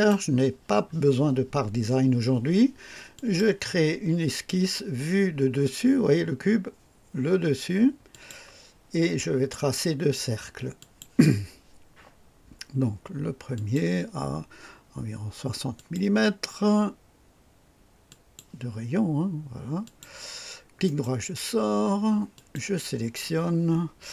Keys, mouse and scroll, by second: 3.2 click, 8.1 click, 10.8 click, 13.5 click, 15.8 click, 18.1 click, 19.8 click, 20.9 right click, 22.3 click.